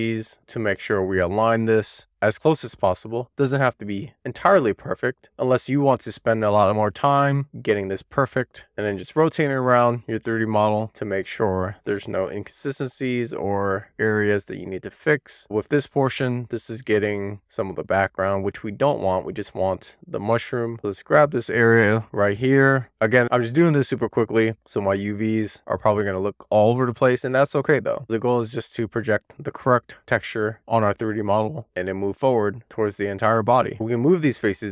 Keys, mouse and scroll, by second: 8.9 middle click, 10.2-11.1 scroll up 1, 11.1-12.0 scroll down 1, 12.0 e, 12.4 r, 15.0 click, 15.5 middle click, 15.8-16.1 shift+scroll up 1, 16.1 shift+middle click, 16.5-17.1 scroll up 1, 17.1 scroll down 1, 17.3 shift+middle click, 17.9-19.7 scroll up 1, 19.7-21.8 drag, 22.5 click, 23.4-24.6 drag, 27.3-28.3 scroll down 1, 28.6-30.6 drag, 31.8-33.1 shift+drag, 33.7 click.